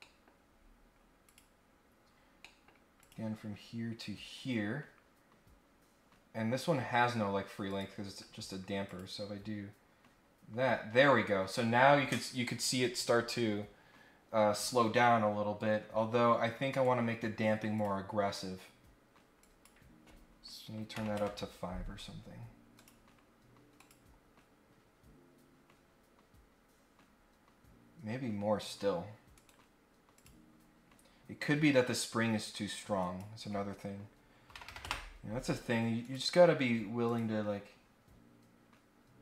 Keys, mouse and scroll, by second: 0.0-0.7 scroll up 4, 1.2 click, 1.6 scroll down 2, 2.0 scroll up 2, 2.3 middle click, 3.0 click, 3.5 scroll down 2, 3.7-4.2 scroll up 1, 4.2 scroll down 1, 4.4 scroll up 1, 7.7 click, 8.8 click, 15.6-16.2 scroll up 4, 16.7 right click, 17.7 click, 19.4 click, 22.7 click, 23.8 click, 27.3-27.6 scroll up 1, 29.3 right click, 30.1 click, 33.0 click, 36.0 click, 37.0 click.